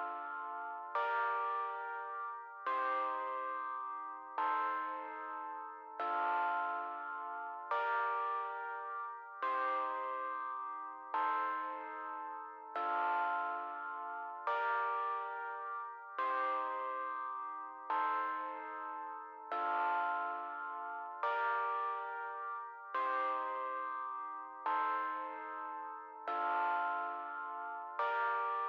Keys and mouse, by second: 13.7 click, 14.4 click, 14.8 click, 16.4 click, 16.9 click, 17.7 click, 18.0 click, 18.7 click, 21.1 click, 23.1 click, 24.0-25.6 typing.